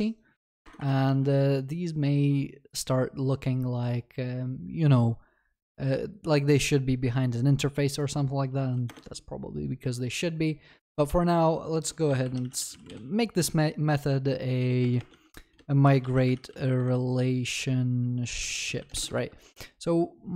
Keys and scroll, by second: 0.9 ctrl+v, 8.9 Return, 19.2 ctrl+s.